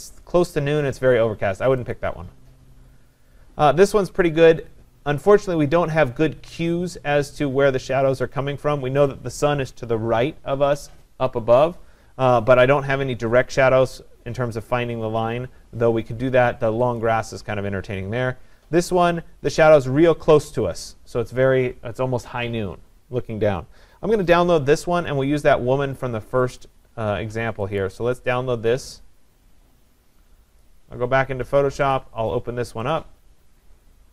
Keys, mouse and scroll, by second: 2.0-7.0 drag, 17.0-22.1 drag, 26.6-27.8 drag, 31.6 click, 31.9 click, 32.9 click.